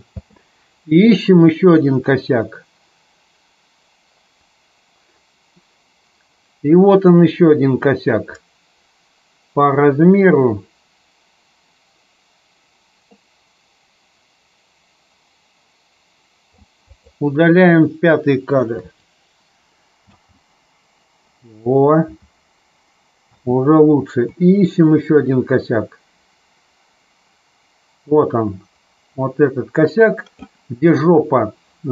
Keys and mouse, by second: 0.1 space, 1.4-16.5 drag, 16.8 click, 18.7 Delete, 20.0 space, 23.3 space, 24.3-30.4 drag.